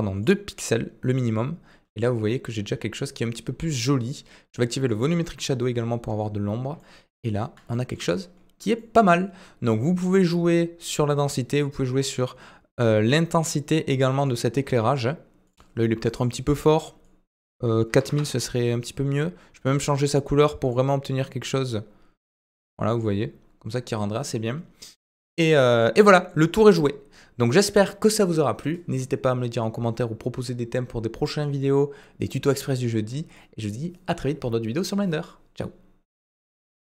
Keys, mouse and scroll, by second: 4.9 click, 6.8 middle click, 7.7 shift+middle drag, 8.8 middle click, 14.2 click, 15.4 click, 16.1-18.6 drag, 19.7 click, 26.1 middle click.